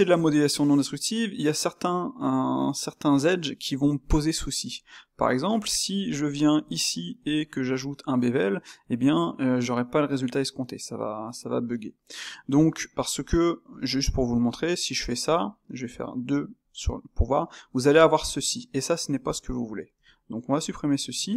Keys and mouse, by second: 5.1 click, 5.6 click, 6.0 Tab, 6.7 shift+click, 7.3-14.3 shift+middle drag, 14.3 space.